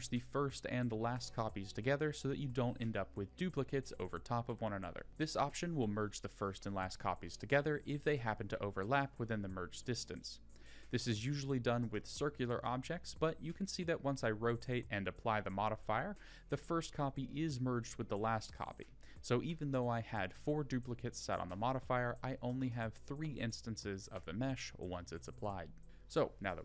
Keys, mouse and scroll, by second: 1.7 click, 7.4 click, 8.6 click, 9.0 scroll down 2, 9.7 r, 16.5-17.1 drag, 17.6 Tab, 18.2 click, 19.6 ctrl+l, 21.9 g, 26.1 click.